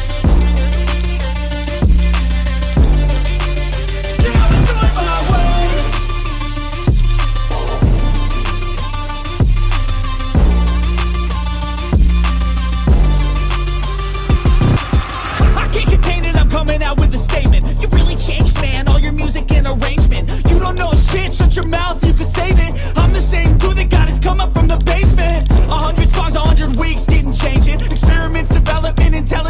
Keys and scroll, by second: 8.1 Return, 8.7 Delete, 9.7 ctrl+d, 17.9 Return.